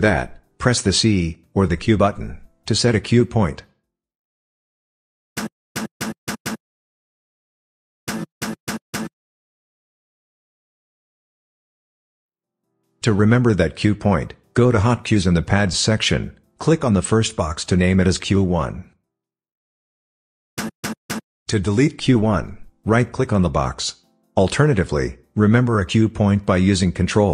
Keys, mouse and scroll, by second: 6.4 click, 8.1 c, 8.4 c, 8.6 c, 8.9 c, 16.5 click, 20.5 c, 20.8 c, 21.1 c.